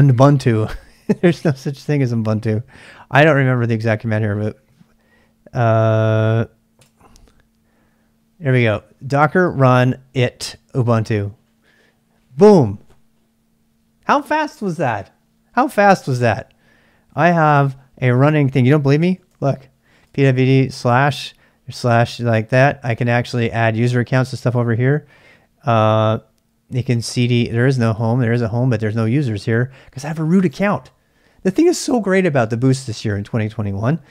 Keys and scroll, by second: 0.0 ctrl+[, 0.1-4.2 typing, 6.7 Return, 18.8-20.4 typing, 26.8-28.8 typing.